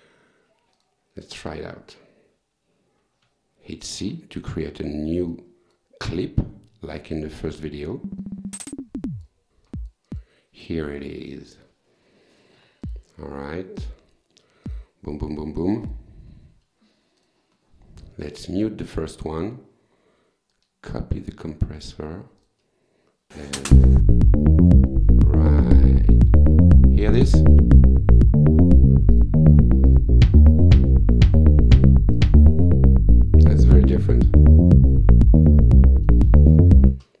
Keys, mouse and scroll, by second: 0.8 click, 3.2 c, 5.3 click, 7.9 click, 9.5 click, 9.7 click, 11.0 click, 12.6 w, 12.9 click, 13.8 click, 14.7 click, 15.9 click, 17.2 click, 19.4 click, 20.5-22.0 drag, 22.4 click, 29.1 click, 29.9 click, 32.2 click, 33.4 click, 36.9 space.